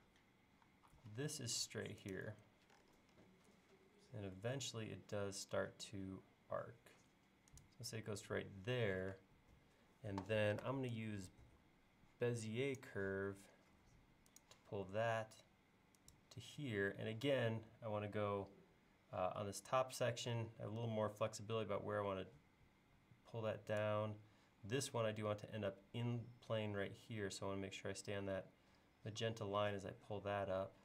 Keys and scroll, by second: 0.1 space, 9.2 space.